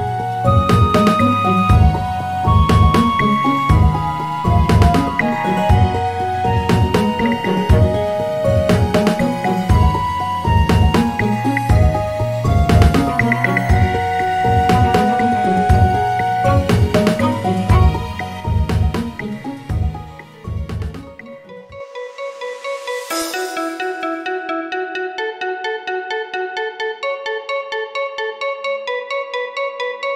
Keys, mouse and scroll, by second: 5.6 s, 6.9 g, 8.5-9.5 scroll up 1, 9.5 r, 10.8 g, 12.2 s, 13.4-14.4 scroll down 1, 14.4 click, 17.4-20.5 drag, 23.6 click, 25.1-28.3 scroll down 2, 29.2-30.1 scroll up 3.